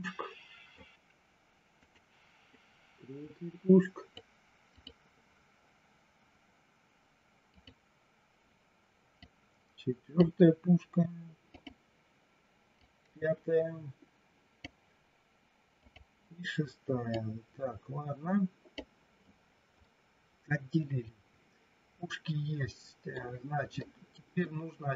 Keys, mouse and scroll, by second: 1.9 click, 3.2-4.2 drag, 4.7 click, 7.4 click, 9.2-10.2 drag, 11.4 click, 12.8-14.7 drag, 15.8 click, 17.2-18.7 drag, 19.8-23.1 middle drag, 23.8 middle click.